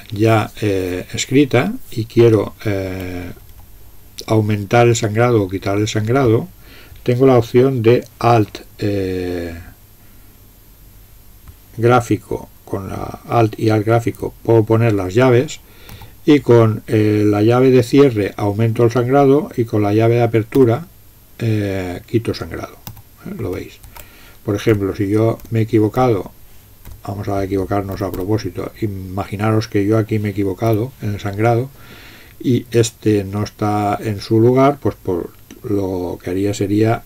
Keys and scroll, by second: 3.0 Left, 3.2 Left, 3.4 Left, 3.6 Left, 16.0 alt+}, 20.6 alt+{, 22.9 alt+}, 23.5 alt+{, 24.8 Left, 25.4 Left, 26.0 Left, 26.9 Left, 28.0 Down, 28.2 Down, 30.7 Delete.